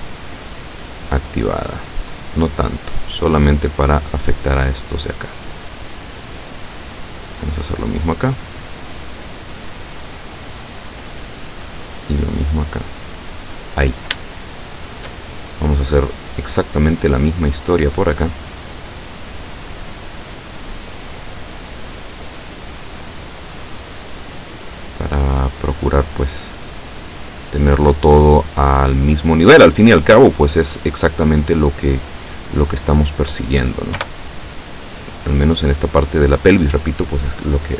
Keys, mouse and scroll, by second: 0.9-1.9 drag, 1.9-2.4 scroll up 1, 2.6-3.5 scroll up 2, 7.5 right click, 8.5-10.9 drag, 11.7 right click, 12.3-13.7 drag, 14.3 shift+middle click, 16.2 right click, 17.0-20.3 drag, 21.4 right click, 21.9-23.9 drag, 24.8 right click, 25.3-27.4 drag, 27.7 right click, 28.5-29.7 drag, 30.1 right click, 30.7-32.5 drag, 32.9 right click, 34.1 o, 34.6-36.7 drag.